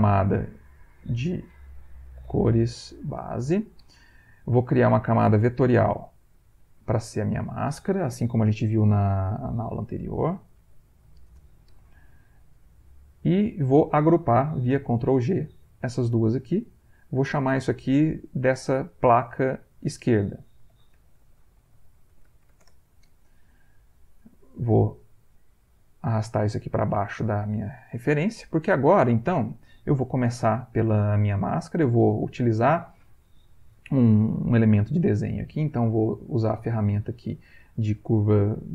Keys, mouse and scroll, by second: 0.6 click, 1.7-3.7 typing, 5.0 click, 6.2 click, 7.2 click, 8.2 shift+m, 9.7-11.4 typing, 12.6 click, 13.6 shift+click, 15.6 ctrl+g, 16.7 click, 19.5 click, 20.5-23.0 typing, 24.0 click, 25.7 click, 26.1 click, 28.4 click, 29.3 click, 35.4 click.